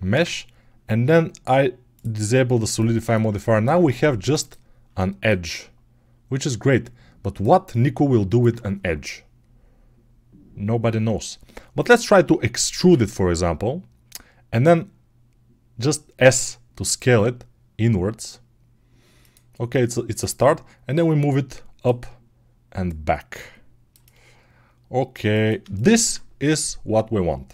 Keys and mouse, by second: 0.0 ctrl+space, 0.0-1.8 ctrl+middle drag, 1.8 click, 1.9-4.2 middle drag, 4.2 right click, 4.3-20.1 middle drag, 12.7 e, 20.1-27.5 drag.